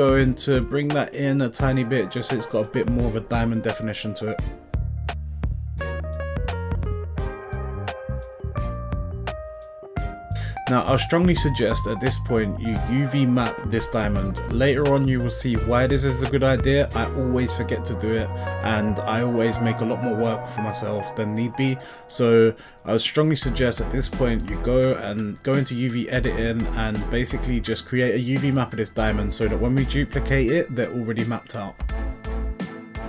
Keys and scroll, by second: 0.2 y, 3.8 s, 8.8 Tab.